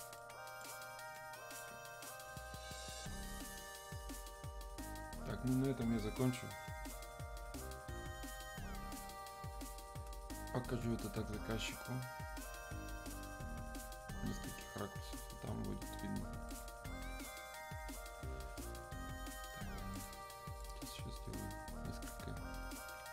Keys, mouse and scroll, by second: 0.2-3.2 drag, 3.2-3.8 scroll up 1, 3.8-4.8 scroll down 1, 9.3-9.9 scroll up 1, 10.7-11.2 scroll down 1, 16.5 click, 17.5-19.2 scroll up 1, 19.2-19.9 scroll down 1, 19.9 click.